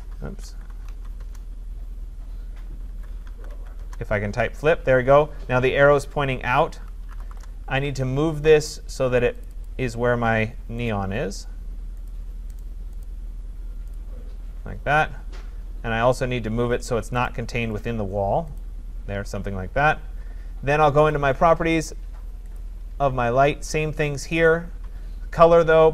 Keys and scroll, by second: 7.3 Return.